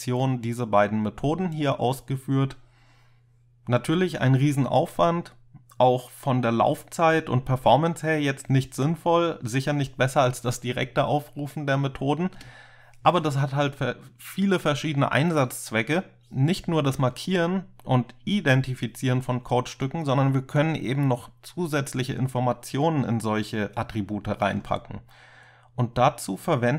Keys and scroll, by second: 12.4 space.